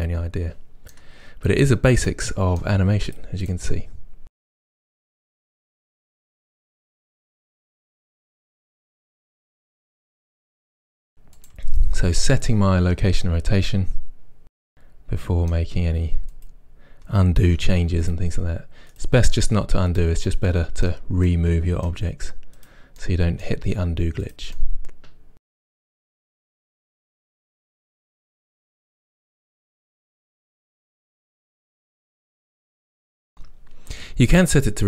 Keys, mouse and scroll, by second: 3.1 click, 3.5 click, 4.3-6.5 middle drag, 4.9 r, 5.3 r, 5.9 r, 6.5 click, 6.6 r, 7.3 click, 7.7 middle click, 7.8-11.0 typing, 7.9 click, 8.3 middle click, 9.1 middle click, 9.6 click, 9.6 right click, 10.5-16.3 middle drag, 10.5 click, 16.3 click, 17.5 r, 17.6 r, 18.2 click, 18.9 click, 19.3 r, 20.0 click, 20.3-22.6 middle drag, 22.6-23.0 drag, 23.0-24.4 middle drag, 23.7 r, 24.4 click, 24.6-25.7 middle drag, 25.7 click, 25.9 r, 26.1 middle click, 26.4 click, 26.5 middle click, 26.6 r, 26.7 click, 26.9 r, 27.6 middle drag, 27.7 click, 27.8-29.2 middle drag, 28.0-31.8 typing, 29.2 click, 29.4-30.0 middle drag, 30.0 click, 30.2 middle click, 30.7 click, 31.2-34.7 shift+middle drag, 31.2 scroll up 2, 32.0 click, 33.2 a, 34.2 i.